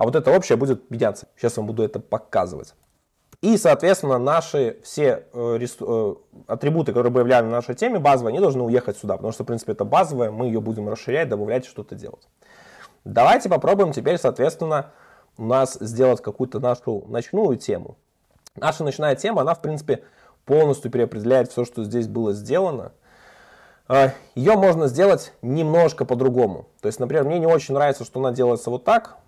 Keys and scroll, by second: 18.2 super+1, 28.6 Escape.